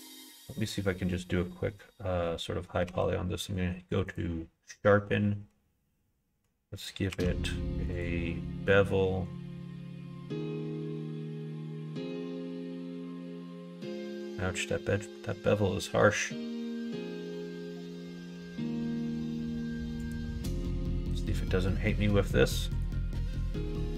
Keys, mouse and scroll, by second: 2.8 q, 7.1 q, 20.5 middle click, 22.7 click.